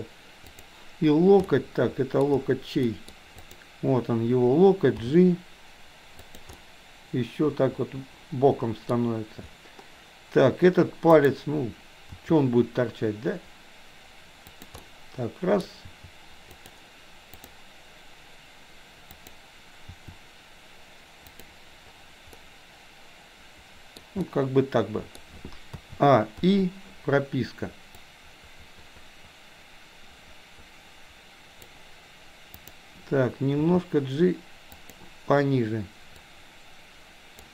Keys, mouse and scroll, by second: 0.6 click, 1.4 middle click, 2.9 middle click, 3.4 click, 5.1 g, 6.6-8.9 middle drag, 11.2 click, 12.2 r, 14.8 middle click, 15.8 r, 17.4 click, 19.2 click, 19.9 r, 22.4-23.9 middle drag, 23.9 scroll down 1, 24.2-25.2 middle drag, 25.2-25.7 scroll down 1, 25.8 a, 26.4 i, 28.1-31.7 drag, 32.6 click, 33.6 g, 36.3-37.4 drag.